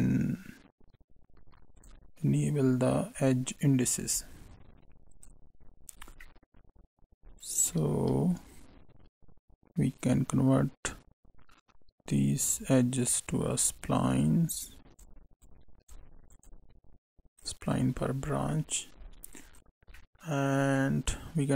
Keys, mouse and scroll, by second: 5.1 click, 5.9 scroll down 3, 6.2 middle click, 8.1 shift+a, 14.1 click, 14.5 click, 15.3 click, 16.2 click, 18.2 scroll down 2, 18.4 middle click, 18.9 scroll up 2, 19.4 right click, 19.9 middle click.